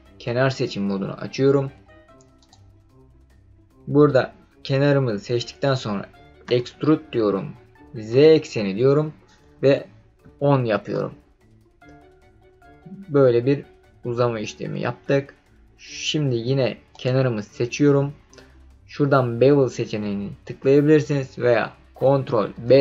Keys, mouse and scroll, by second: 2.4 click, 6.4 e, 8.1 z, 9.5 KP_1, 10.2 KP_0, 10.7 KP_Enter, 11.9-12.5 scroll down 3, 12.5-13.1 scroll up 4, 13.1-13.8 scroll down 2, 14.2-15.0 scroll up 5, 15.0-15.7 scroll down 1, 16.9 click, 22.5 ctrl+b.